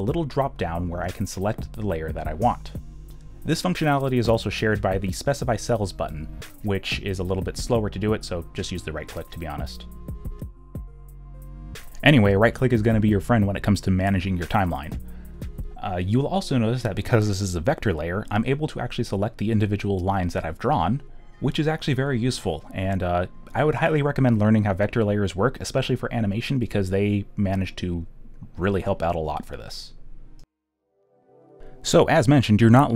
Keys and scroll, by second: 7.3 q.